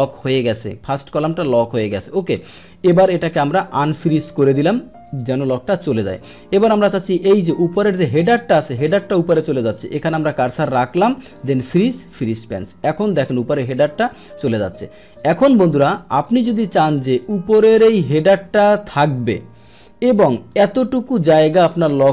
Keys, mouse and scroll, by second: 3.1 click, 5.0 click, 6.9-7.4 scroll down 1, 7.4-8.1 scroll up 1, 8.1-11.2 scroll down 1, 11.3 click, 12.0 click, 12.8 middle click, 13.8-15.1 scroll down 1, 15.1 click, 16.1 click, 18.2 click, 20.5 click.